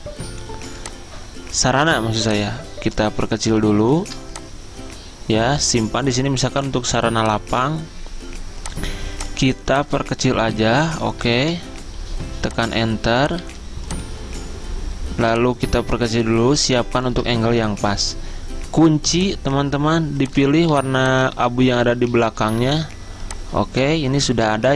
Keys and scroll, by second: 11.6 Return, 12.2 z, 12.9 z, 13.6 z, 17.6 Return, 21.0 z, 22.9 v.